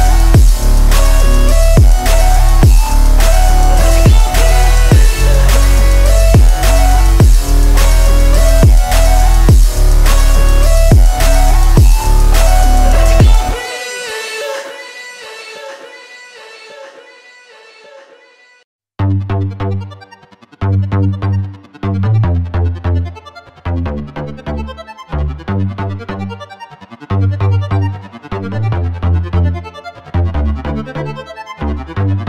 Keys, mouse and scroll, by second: 1.7 click, 3.6 click, 6.3 click, 7.2 click, 7.9-8.4 scroll down 2, 8.4-9.1 middle drag, 9.5 scroll up 2, 10.0 Tab, 10.6 Tab, 12.2 click, 13.4 click, 14.4 Tab, 17.5 click, 20.6 click, 24.6 click, 27.2 click, 29.2 click, 30.0 click.